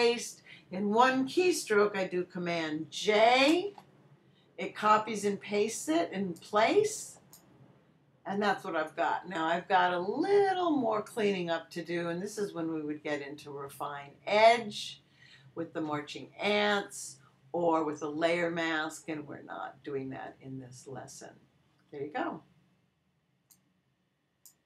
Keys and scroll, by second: 3.5 super+j.